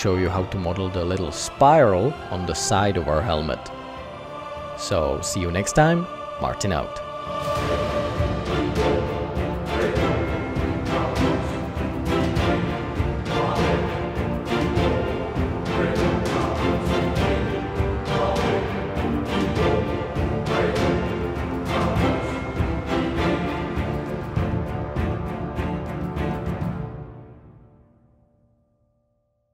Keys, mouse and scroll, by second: 2.8 Tab.